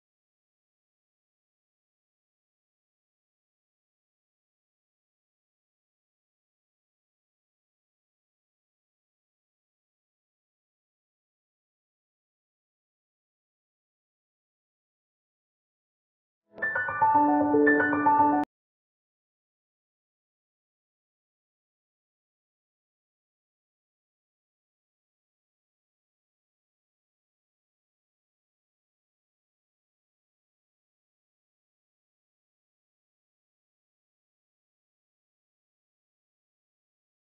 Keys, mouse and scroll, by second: 0.3 click, 4.2 click, 4.7 scroll up 1, 5.3 scroll down 1, 5.9 scroll up 1, 6.6 scroll down 1, 7.2 scroll up 1, 7.9 scroll down 1, 8.3 scroll up 1, 9.1 scroll down 1, 9.9 click, 10.4 scroll down 1, 10.7 scroll up 1, 12.3 scroll up 1, 12.9 scroll up 1, 13.7 click, 15.7 scroll down 1, 16.4-17.2 scroll up 1, 17.2 click, 18.2 ctrl+t, 18.7 click, 19.4 scroll up 1, 19.6 right click, 20.4 shift+click, 21.1 ctrl+t, 21.5 click, 22.4 scroll down 1, 22.8 scroll up 1, 23.4 right click, 23.7 scroll down 1, 24.2-24.5 scroll up 1, 24.6 click, 25.9 shift+click, 28.2 ctrl+j, 28.4 click, 28.7 scroll down 1, 29.2 scroll up 1, 29.9 scroll down 1, 30.1 scroll up 1, 30.7 click, 30.9 scroll down 1, 31.5 scroll up 1, 32.6 scroll down 1, 33.0 scroll up 1, 33.6 click, 33.8 scroll down 1, 34.9 click, 35.2 scroll up 1, 35.9 click.